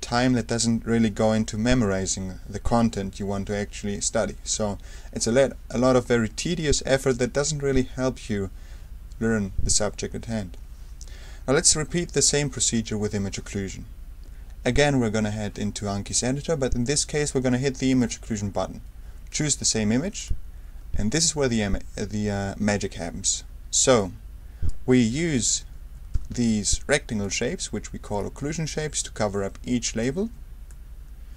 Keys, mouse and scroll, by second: 11.6 d, 14.7 a, 17.9 click, 19.3 click, 20.2 click, 23.9-25.2 super+right drag, 25.2 ctrl+f, 26.1 r, 27.2-28.7 drag, 28.4 r, 29.0-30.5 drag, 30.2 r, 30.7-31.3 drag.